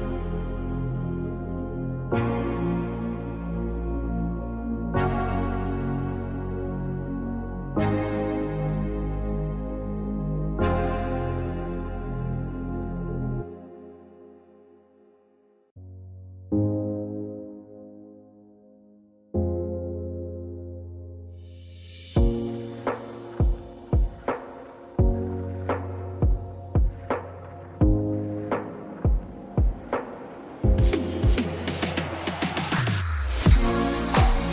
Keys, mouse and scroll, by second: 5.4-9.7 drag, 9.7 space, 10.0-13.7 drag, 13.7 ctrl+g, 17.2 click, 21.9 click, 24.1-29.0 drag.